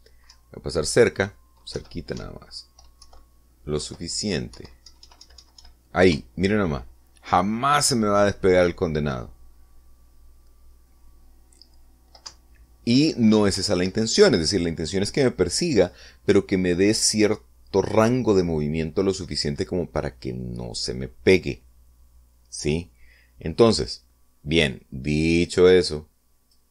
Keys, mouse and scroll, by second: 0.5 p, 1.4 Down, 2.9 Right, 3.3 Up, 4.2 Left, 4.9 Down, 5.7 Left, 6.0 Right, 7.2 Up, 13.4 Down, 14.7 Escape.